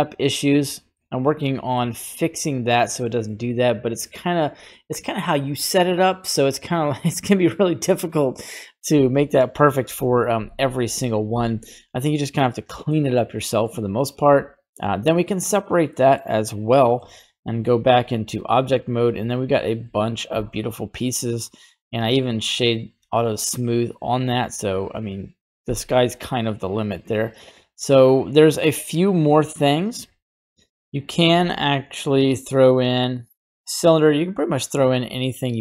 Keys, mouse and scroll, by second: 0.3 scroll down 1, 0.6 Tab, 1.1-1.8 scroll down 4, 1.7 middle click, 2.5 scroll up 1, 3.0 middle click, 12.4 scroll down 1, 12.5 middle click, 13.4 middle click, 14.2 click, 15.9 middle click, 16.9 Tab, 17.5 right click, 18.3 g, 19.4 right click, 19.8 g, 21.2 middle click, 21.6 right click, 21.8 g, 23.0 middle click, 23.7-24.7 scroll up 3, 27.4 middle click, 30.7 middle click, 31.4 shift+a, 34.8 click, 35.5 middle click.